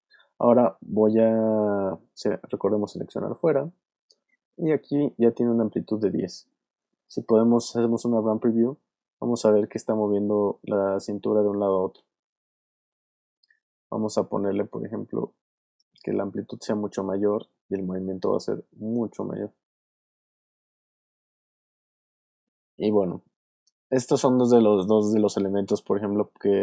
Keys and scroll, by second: 8.4 space, 13.4 space, 18.4 space.